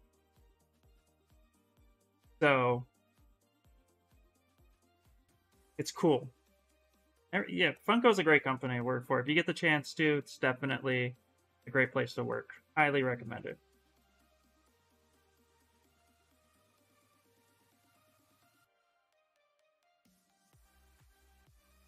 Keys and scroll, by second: 3.8 s, 16.6 b, 16.8 b.